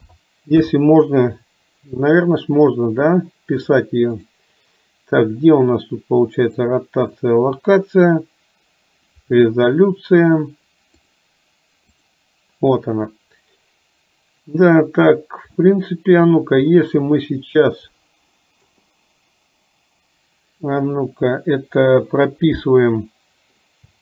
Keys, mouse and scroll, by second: 6.5 click, 12.1 click, 15.6 shift+middle click, 17.1-18.7 middle drag.